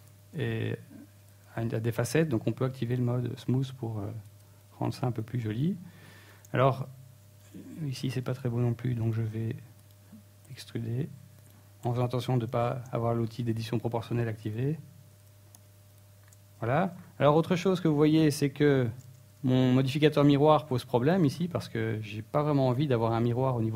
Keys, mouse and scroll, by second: 1.0 click, 1.8 t, 2.7 shift+middle click, 3.0 middle click, 3.5 shift+middle click, 3.9-4.2 scroll up 2, 4.2 middle click, 4.6 Tab, 5.0 middle click, 6.3 alt+right click, 6.9-9.8 typing, 7.2 right click, 8.0 right click, 9.5 right click, 10.9 s, 12.4 click, 13.0 s, 13.8 click, 14.2 scroll down 2, 14.2 Tab, 14.6 Tab, 14.8-15.2 scroll down 2, 15.0 middle click, 15.4 Tab, 15.5 scroll up 1, 15.7 scroll down 1, 16.4 scroll up 2, 16.6 ctrl+Tab, 17.7 right click, 18.3 x, 19.0-19.3 scroll down 3, 19.2 Tab, 19.8 middle click, 20.3-21.0 scroll down 2.